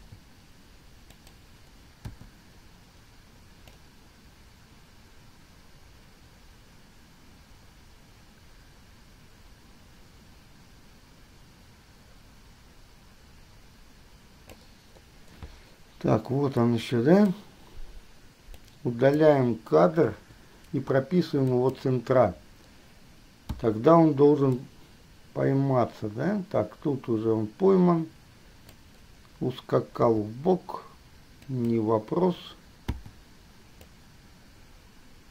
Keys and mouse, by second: 0.2 r, 2.3 i, 3.9-5.3 drag, 11.6 middle drag, 11.9-14.8 middle drag, 18.8 click, 20.4 Delete, 21.7 click, 23.7 i, 24.8-26.6 drag, 30.2 g, 33.1 i.